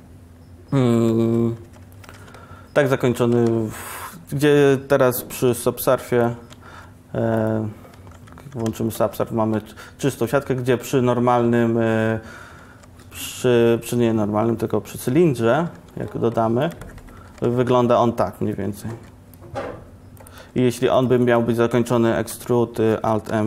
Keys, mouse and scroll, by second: 0.5 Tab, 1.7 Tab, 2.1 Tab, 3.7 ctrl+shift+r, 5.1 ctrl+r, 8.3 ctrl+1, 8.6 ctrl+1, 8.8 ctrl+1, 9.1 Tab, 10.3 Tab, 12.9 shift+a, 16.0 g, 17.6 ctrl+shift+r, 19.0 ctrl+r, 20.7 ctrl+Tab, 22.5 e.